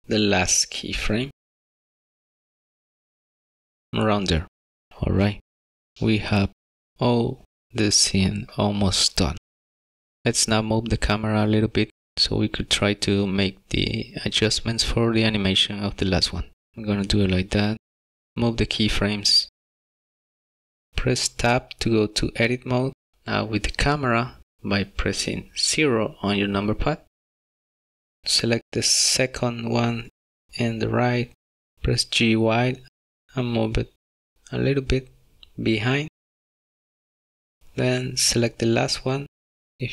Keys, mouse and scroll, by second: 1.1 click, 4.4 click, 4.9 click, 5.1 click, 5.9 click, 6.0 middle click, 6.2 middle click, 8.0 click, 13.5 click, 21.5 Tab, 21.5 click, 22.9-23.5 scroll up 3, 23.7 shift+middle click, 24.4 KP_0, 24.7 g, 28.2 KP_0, 28.6 g, 29.3 y, 31.5 g, 37.6 click.